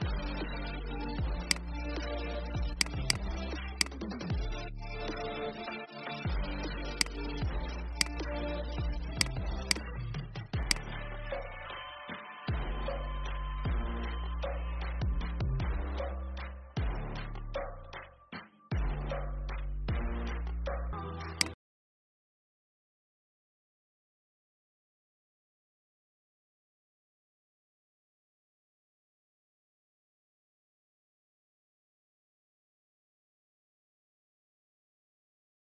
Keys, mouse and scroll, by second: 1.3 click, 4.4 ctrl+f, 6.9 click, 12.3 alt+scroll down 1, 13.2 alt+scroll up 1, 18.0 alt+scroll down 1, 18.8-19.5 alt+scroll up 1, 20.8 F10.